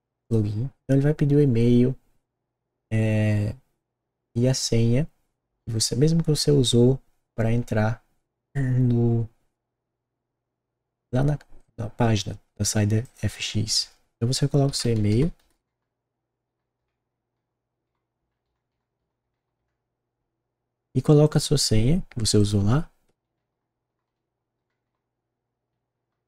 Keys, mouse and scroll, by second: 0.1 click, 13.0 click, 14.4-20.0 typing, 23.2-25.9 typing.